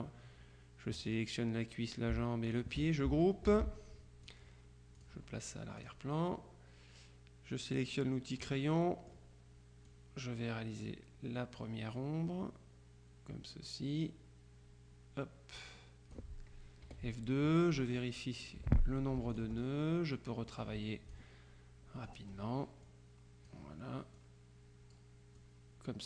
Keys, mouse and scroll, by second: 2.6 shift+click, 3.6 ctrl+g, 4.3 click, 5.1 click, 5.9 click, 8.5 click, 10.0-16.7 drag, 17.0 F2, 18.3 click, 18.7 Delete, 19.4 ctrl+click, 20.6-21.7 drag, 22.2 click, 22.9-24.1 drag, 24.3-25.5 drag.